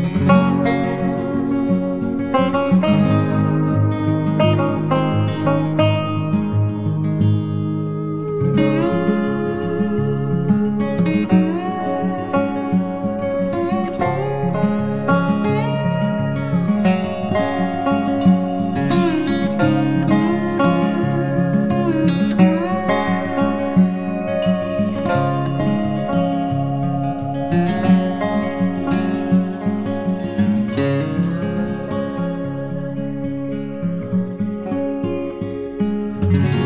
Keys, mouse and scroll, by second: 16.4-17.1 alt+scroll up 1, 28.1 right click, 30.3-30.9 typing, 32.5-32.9 typing, 34.3 right click, 36.0-36.6 typing.